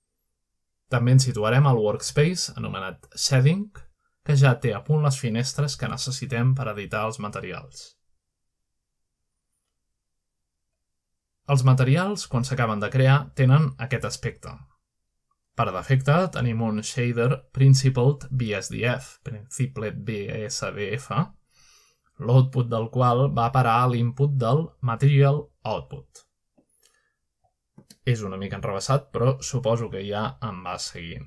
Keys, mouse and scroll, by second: 0.0-0.3 scroll down 2, 0.3-1.2 scroll up 3, 5.2 click, 6.9 click, 7.9 scroll down 3, 8.3 scroll up 2, 12.4-12.8 scroll down 2, 12.9 scroll up 2, 13.6 scroll up 1, 14.7-16.0 scroll up 2, 16.2 click, 17.3-19.8 scroll up 5, 19.1 middle click, 20.9-21.6 middle drag, 21.5-22.8 scroll down 3, 22.7 middle click, 27.8-28.9 middle drag.